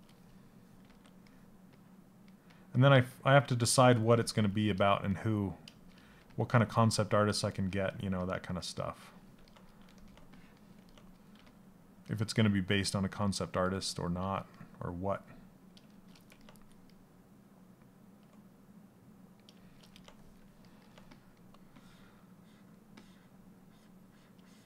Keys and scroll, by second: 0.4 s, 5.7 s, 11.0 s.